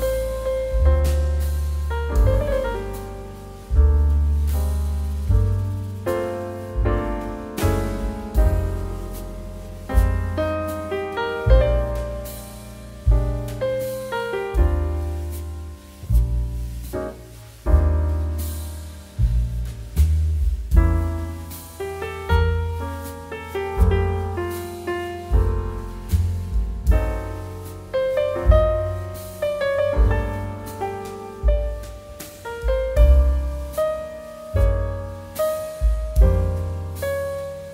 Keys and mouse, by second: 0.7 shift+z, 1.9 click, 2.0 middle click, 2.4 shift+middle click, 2.7 middle click, 2.9 shift+middle click, 3.1 shift+d, 3.3 middle click, 3.5 click, 4.0 middle click, 4.3 shift+middle click, 4.6 shift+d, 4.8 middle click, 5.0 click, 5.5 shift+middle click, 5.9 shift+middle click, 6.8 click, 10.4 x, 10.6 click, 11.2 middle click, 15.6 click, 22.1 x, 22.3 click, 22.5 middle click, 24.5 shift+middle click, 24.7 middle click, 26.6 middle click, 26.8 shift+middle click, 27.0 middle click, 27.3 shift+d, 27.6 middle click, 27.8 click, 28.0 r, 30.2 9, 30.3 0, 31.1 middle click, 31.5 g, 31.7 shift+z, 32.1 click, 33.7 Escape, 34.2 shift+a, 34.6 click, 36.1 middle click, 36.6 middle click, 37.0 shift+middle click, 37.3 middle click, 37.6 s.